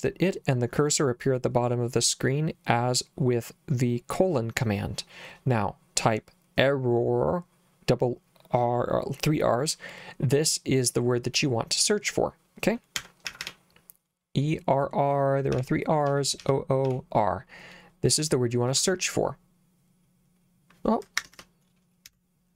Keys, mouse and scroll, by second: 12.7-13.9 typing, 15.6-17.4 typing, 18.7 Return, 22.1-22.5 typing.